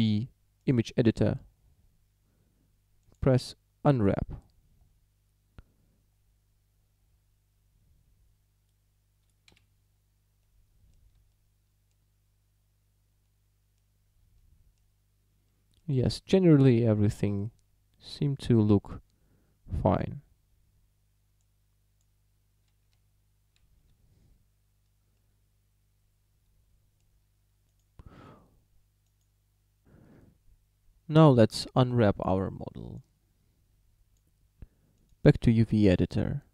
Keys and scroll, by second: 9.5 Escape, 11.1 a, 23.0 Tab.